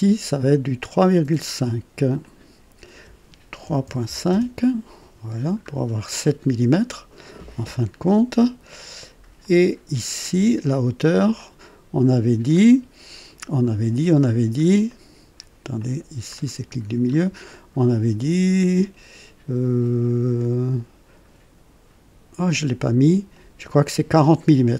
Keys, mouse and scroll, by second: 2.2 click, 3.6 KP_3, 3.8 ., 4.1 KP_5, 4.3 Return, 5.5-5.9 scroll up 1, 6.2-7.2 right drag, 9.1-9.9 typing, 9.4-11.5 drag, 12.4 click, 13.0 typing, 14.3 scroll up 1, 14.8 right click, 15.7 click, 16.3-17.3 middle drag.